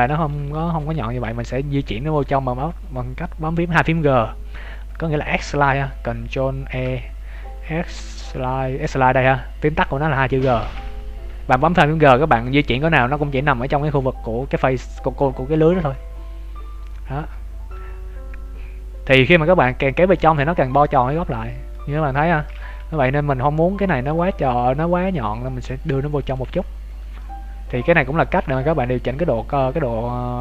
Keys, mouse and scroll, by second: 0.0 shift+middle click, 1.1 g, 6.7 ctrl+e, 20.1 middle click, 22.2 ctrl+z, 22.7 g, 26.9 alt+right click, 27.2 middle click, 28.3 g.